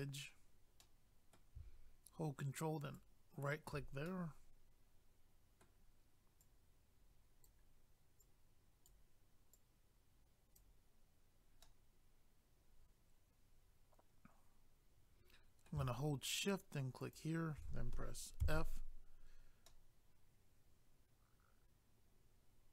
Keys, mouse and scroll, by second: 0.8 middle click, 2.8 ctrl+right click, 3.0 ctrl+right click, 4.1 middle click, 6.4 click, 8.2 click, 9.5 click, 11.6 middle click, 17.0 shift+click, 17.1 shift+click, 18.4 f, 19.7 middle click.